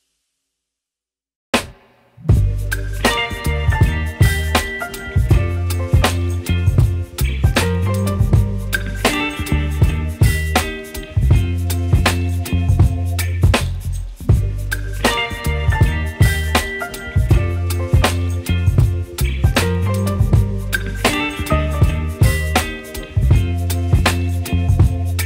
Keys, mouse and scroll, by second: 6.1 Return, 8.9 Return, 9.1 double click, 21.6 right click, 21.6 s, 21.8 u, 22.3 r, 22.5 Return.